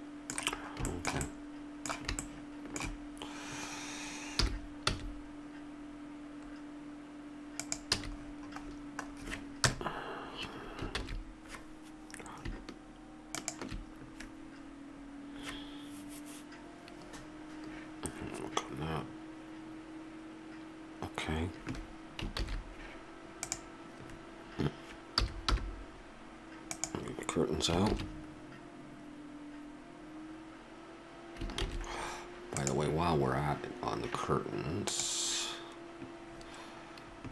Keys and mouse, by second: 1.3-4.4 middle drag, 4.4 g, 8.2 a, 9.6 KP_0, 11.3 shift+z, 22.5 shift+z, 23.5-25.1 drag, 25.1 g, 28.1 shift+z, 31.9 shift+z, 32.6-34.6 drag, 34.8-36.6 drag, 36.6-37.3 middle drag.